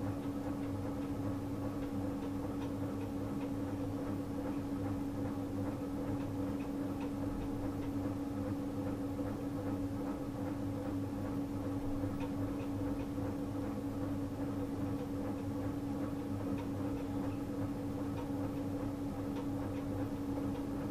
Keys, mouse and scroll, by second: 10.9 click, 11.3 click, 15.5 click, 18.6 click.